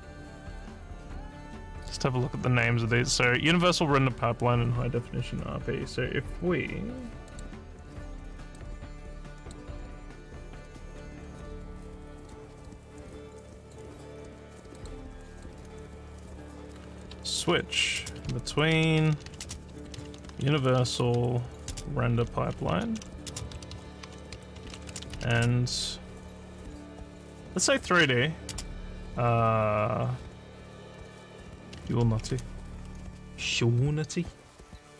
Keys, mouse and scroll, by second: 7.3 click, 8.6-9.6 drag, 11.3-12.3 drag, 13.1 click, 14.8 click, 15.4 click, 16.7-25.7 typing, 27.6-28.4 typing, 34.0 scroll up 1.